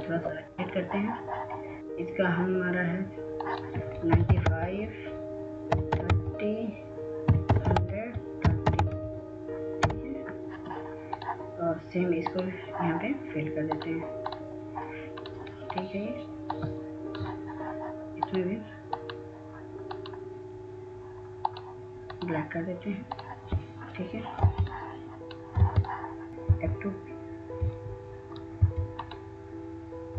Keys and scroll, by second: 5.6-10.6 typing, 11.6 Return, 26.2 F2, 28.3 F2.